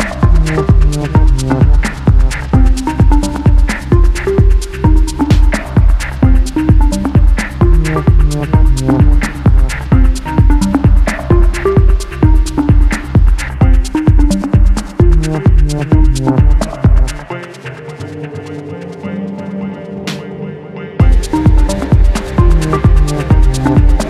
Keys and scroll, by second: 3.3-6.9 typing, 8.7 space, 12.4 BackSpace, 12.7 space, 22.4-24.0 typing.